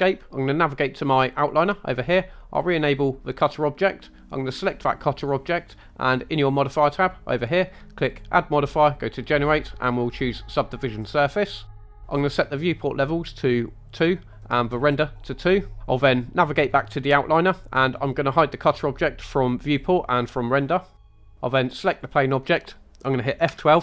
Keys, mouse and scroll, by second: 2.7-4.7 drag, 8.1-11.5 drag, 13.9-14.7 drag, 19.7 click, 21.1-22.2 drag.